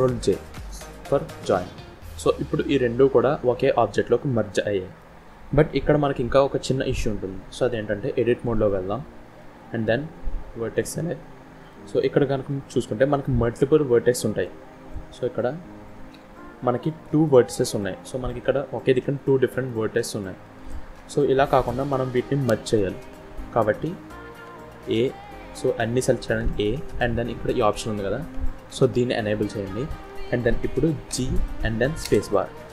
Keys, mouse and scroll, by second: 1.2 ctrl+j, 2.5 middle click, 5.5-6.8 scroll up 3, 6.8 middle click, 8.3 Tab, 10.7 click, 11.2 scroll up 1, 11.6 middle click, 12.2 scroll up 2, 13.1 middle click, 14.8 click, 16.0 g, 17.1 scroll up 1, 17.2 middle click, 20.4 ctrl+z, 21.0-21.3 scroll down 1, 21.3 middle click, 23.8 scroll down 1, 24.7 a, 29.2 click, 31.0 g.